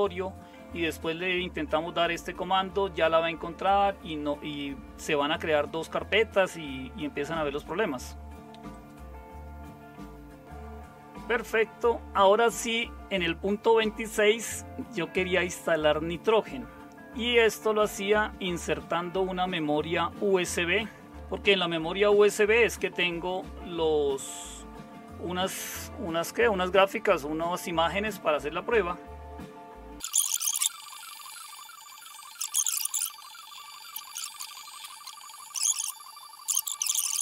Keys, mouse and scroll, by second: 33.2 super+w, 33.3 super+w, 33.5 super+0, 34.6 shift+super+q, 34.7 click.